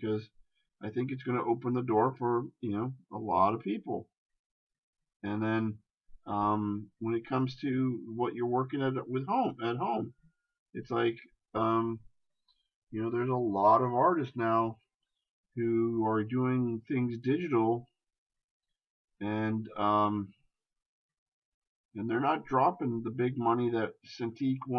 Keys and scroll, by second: 13.8 shift+space.